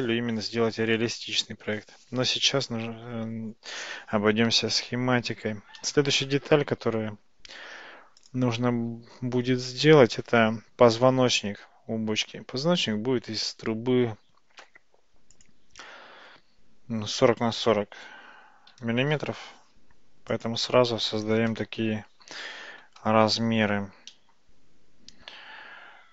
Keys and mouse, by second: 5.6 shift+a, 15.4-19.9 drag, 20.4-22.5 drag, 24.2-25.4 middle drag.